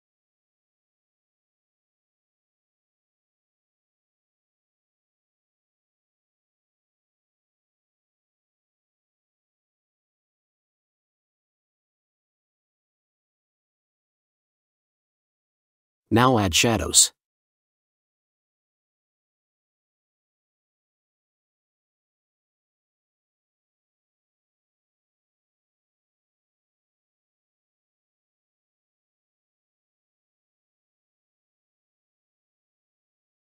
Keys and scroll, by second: 3.2 ctrl+l, 13.5 ], 18.5 ctrl+t, 24.2 Right, 27.2 Return, 30.4 ctrl+j, 31.9 ctrl+t.